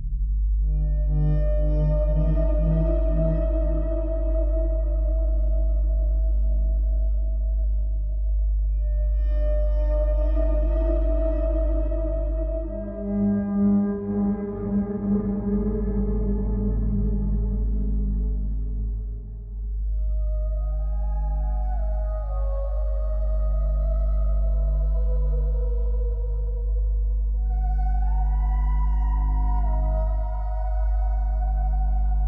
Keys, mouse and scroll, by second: 0.2 click, 5.1 click, 6.7 click, 8.5 click, 11.5 click, 14.8 click, 19.8 click, 24.3 click, 28.6 click, 30.4 click, 31.5 click.